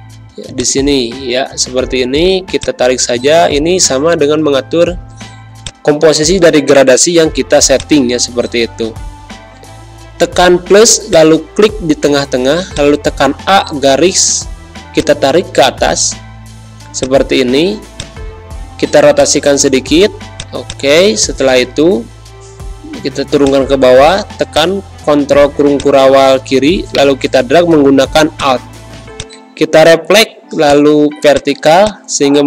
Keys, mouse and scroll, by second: 5.6-7.7 drag, 8.9 =, 11.0 click, 12.1 a, 12.7-14.9 drag, 15.8 Pause, 16.6 v, 17.0-22.0 drag, 22.0 ctrl+shift+[, 26.9 shift+right click, 28.3 shift+click.